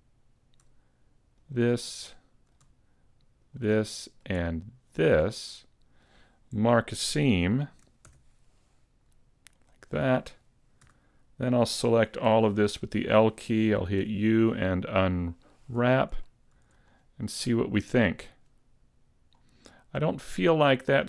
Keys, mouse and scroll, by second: 1.4 shift+right click, 1.8 middle click, 3.4 shift+right click, 3.8 middle click, 5.0 shift+right click, 5.4 middle click, 8.1 ctrl+e, 10.0-10.8 scroll down 2, 10.8 a, 12.2 l, 14.0 u, 15.8-16.2 scroll down 3, 16.2 shift+middle click, 16.9 scroll up 2, 17.2 middle click, 19.4 scroll up 1, 19.7 middle click.